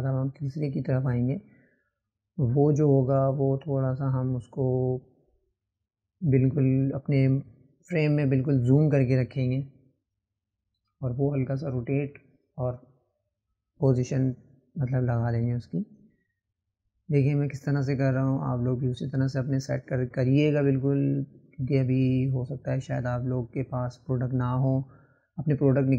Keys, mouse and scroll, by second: 0.9 click, 4.1-10.8 right drag, 10.8-13.8 drag, 15.6 click, 19.6-20.6 right drag, 20.6 click, 22.2-23.3 right drag, 23.3 click, 24.7 click, 25.2-25.9 drag.